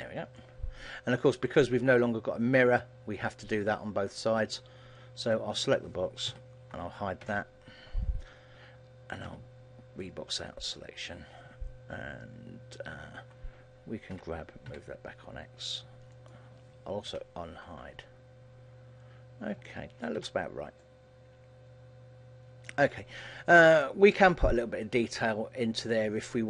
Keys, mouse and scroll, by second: 0.0 scroll up 1, 0.2 scroll down 2, 0.5 shift+middle click, 1.2 shift+middle click, 2.7-3.3 scroll up 3, 5.3 right click, 6.4 ctrl+l, 7.3 h, 18.5 alt+h, 19.2-19.8 scroll down 5, 19.8 middle click, 20.3 a, 20.6-21.2 scroll down 2, 20.9 middle click, 23.1-23.9 scroll up 3, 23.9 shift+middle click, 23.9-24.6 scroll up 2, 24.6-25.0 scroll up 2, 25.0 middle click.